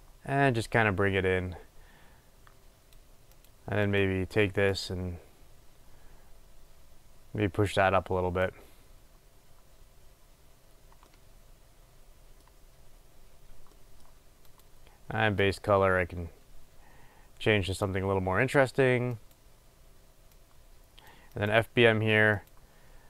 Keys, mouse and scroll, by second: 15.6 click, 19.6-23.0 drag.